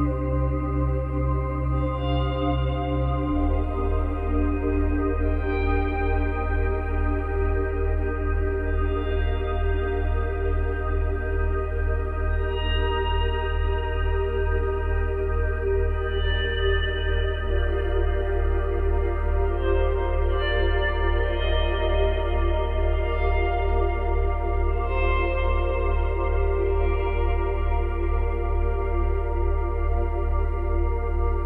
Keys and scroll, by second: 1.5 ctrl+z, 6.0 space, 7.2 space, 11.0 ctrl+z, 21.9 space, 24.0 space, 26.2 space, 28.7 space, 30.8 space.